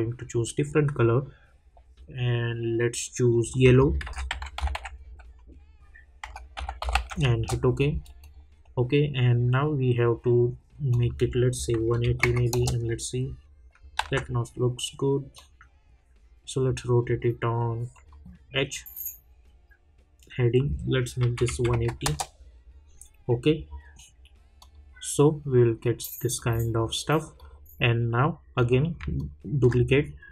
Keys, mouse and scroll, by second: 3.4 shift+Num_Lock, 3.4 click, 4.0-4.8 typing, 6.5-6.9 typing, 7.3 Return, 8.2 click, 10.9 click, 12.5 Return, 14.0 ctrl+z, 15.3-17.9 drag, 22.0 Return, 24.6 click, 29.1 ctrl+click.